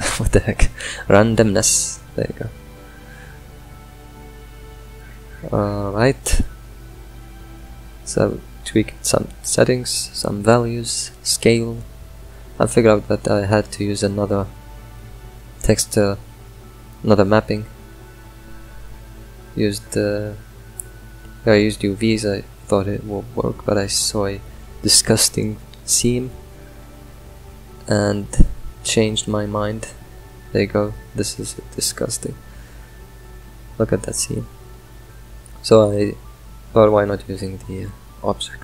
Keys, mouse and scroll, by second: 3.1 middle click, 3.7-12.0 drag, 12.8 middle drag, 13.1-14.2 scroll down 10, 13.6 middle click, 14.5 middle click, 15.2 click, 15.8 shift+d, 18.7 Left, 22.6-23.9 drag, 23.9-25.4 middle drag, 25.4 click, 26.8 scroll up 3, 29.5-30.6 middle drag, 30.6-30.9 scroll up 3, 30.9 middle click, 31.5 scroll up 2, 31.7 middle click, 32.2-35.1 drag, 35.1 middle click, 35.4-35.8 scroll down 6, 35.8-37.8 middle drag, 37.8-38.2 scroll down 3.